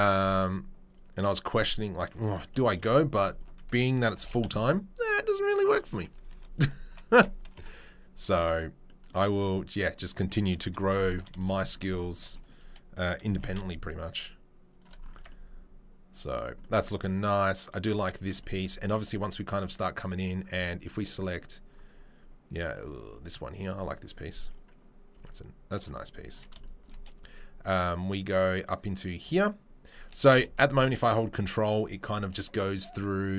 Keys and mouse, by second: 1.5 alt+click, 1.9 alt+click, 3.2 alt+click, 3.3-6.6 middle drag, 4.1 g, 6.3 2, 6.6 alt+click, 6.9-11.0 middle drag, 7.5 Delete, 10.9 alt+3, 11.0 click, 11.1-22.9 shift+middle drag, 13.3 g, 15.1 Tab, 22.9-24.6 drag, 24.6-28.8 middle drag, 25.1 s, 28.8-30.3 drag, 30.3 g.